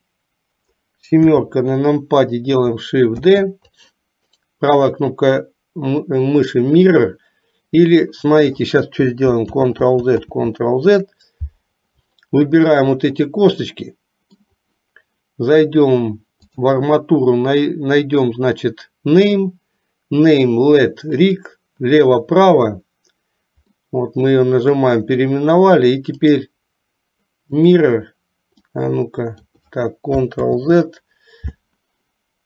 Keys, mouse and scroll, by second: 1.3 KP_7, 3.3 shift+d, 4.3-7.7 right drag, 9.6 ctrl+z, 10.3 ctrl+z, 12.7 shift+click, 13.7 middle click, 16.5-21.6 drag, 23.8-24.9 middle drag, 26.2-28.0 right drag, 28.8 click, 30.6 ctrl+z.